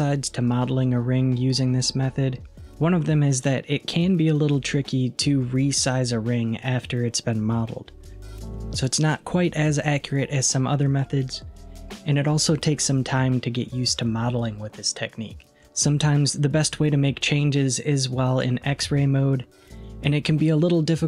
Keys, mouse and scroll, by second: 14.3-15.6 middle drag, 18.7 alt+z, 19.7 middle click, 19.8 scroll down 2.